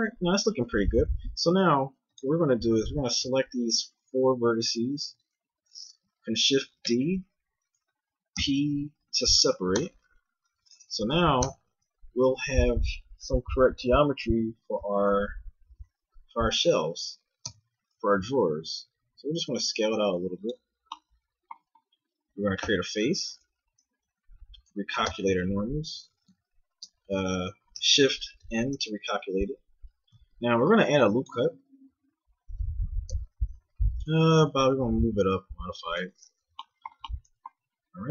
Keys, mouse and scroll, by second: 0.6 Tab, 1.4 ctrl+Tab, 4.9-6.8 drag, 6.8 shift+d, 8.3 p, 9.8 Tab, 11.0-12.7 drag, 11.4 Tab, 12.4 a, 15.1 KP_1, 15.7 Tab, 17.4 Tab, 18.5 s, 22.6 f, 25.1 ctrl+n, 25.9 a, 26.1 a, 26.8 ctrl+n, 28.4 ctrl+shift+n, 29.1 a, 30.5 ctrl+r, 32.5-34.3 drag, 33.0 KP_1, 34.3 g.